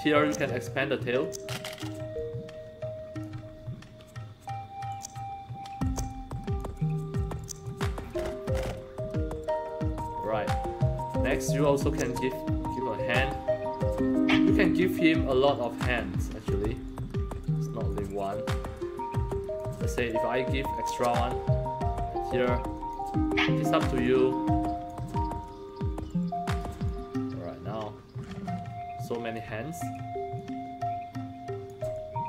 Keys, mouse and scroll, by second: 0.2 click, 1.2 click, 2.1-3.2 alt+drag, 3.5 scroll up 1, 4.8 click, 5.8 click, 7.3 click, 8.0 scroll up 1, 10.1 scroll up 2, 11.8-13.8 drag, 14.9 click, 16.3 click, 16.8-17.9 drag, 18.7 click, 20.7-22.8 drag, 24.0 click, 25.4-26.5 drag, 26.8-29.3 alt+drag, 29.7 click, 30.3-31.6 drag, 31.9-32.2 alt+drag.